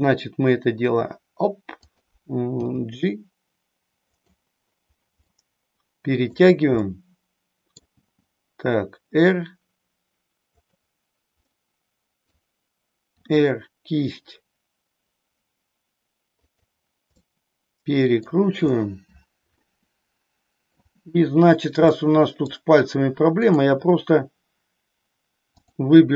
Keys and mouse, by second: 1.9 click, 2.6 g, 5.3-6.4 middle drag, 6.8-7.8 middle drag, 7.9 g, 11.6 middle click, 13.2 r, 16.6 click, 17.2-18.4 middle drag, 19.7-20.8 middle drag, 21.9 middle click, 23.4-24.6 drag, 25.6-26.1 drag.